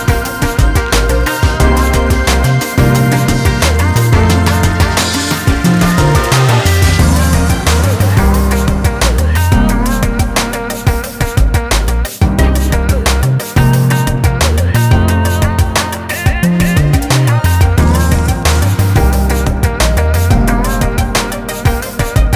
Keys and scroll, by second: 11.4 ctrl+z.